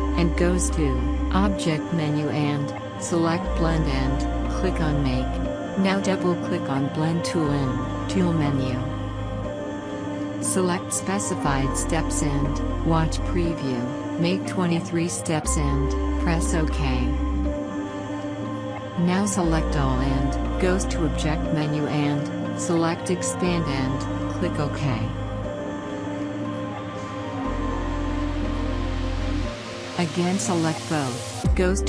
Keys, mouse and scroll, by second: 7.6 click, 10.1 click, 14.3 typing, 15.6-27.7 drag.